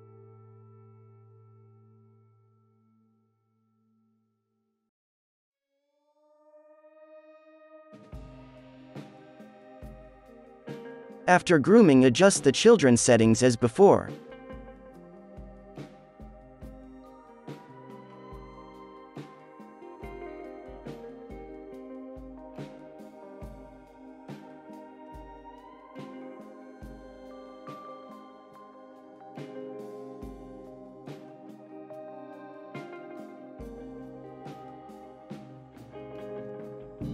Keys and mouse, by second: 0.1-1.5 middle drag, 0.9 click, 1.5 right click, 1.7 ctrl+z, 1.8 click, 2.7 click, 2.7 middle click, 2.9 f, 3.2 ctrl+z, 3.3 f, 4.0 click, 4.3 f, 4.5 click, 5.2 click, 5.2 right click, 5.3 f, 5.3-7.2 middle drag, 5.7-7.3 drag, 5.7-7.3 right drag, 6.0 ctrl+z, 6.8 f, 7.2 f, 7.3-11.6 drag, 7.3 right click, 7.6 ctrl+z, 8.2 ctrl+z, 8.3 f, 9.7 alt+a, 9.8-11.0 right drag, 10.0 ctrl+s, 11.7 middle click, 12.1 click, 12.5 right click, 12.9 middle click, 13.1-15.7 drag, 15.5-16.6 middle drag, 15.8 z, 16.2 alt+a, 16.4 ctrl+s, 17.0 middle click, 17.7-21.5 drag, 21.3 ctrl+s, 21.5-22.8 middle drag, 22.0 ctrl+s, 22.8 click, 23.2 alt+a, 23.5 ctrl+s, 23.8-24.8 drag, 25.6 click, 25.8 ctrl+s, 25.9-27.0 middle drag, 26.5 ctrl+s, 27.9 z, 28.2 middle click, 28.3-31.1 drag, 28.3 right click, 29.9-31.8 middle drag, 30.5 KP_0, 31.0 z, 32.6 ctrl+s.